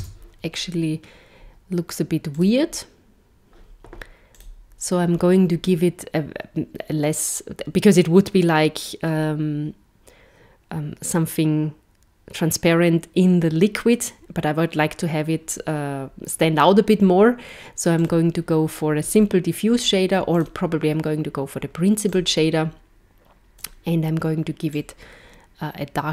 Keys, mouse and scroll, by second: 0.0 Tab, 2.3 click, 4.3 click, 20.3 click, 23.5 click.